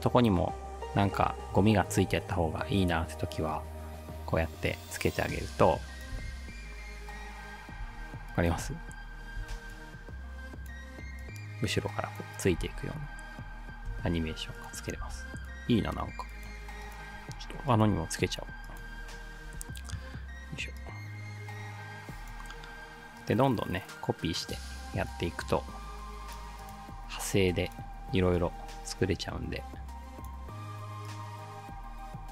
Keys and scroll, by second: 2.0 ctrl+d, 6.2 space, 7.9 space, 8.6 space, 12.6 space, 13.9 space, 15.1 space, 19.5 ctrl+d.